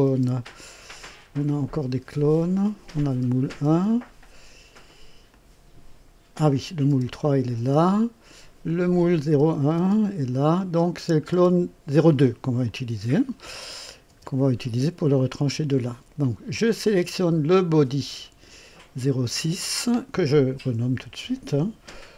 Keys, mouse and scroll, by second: 0.0 space, 2.1 click, 3.0 space, 3.6 space, 5.2 click, 6.5 click, 6.8 space, 7.5 space, 8.6 click, 9.2 space, 9.7 space, 10.4 click, 12.6-14.1 drag, 14.0 space, 15.5 space, 17.7 click, 19.7 click, 20.9 F2, 21.9-22.1 typing.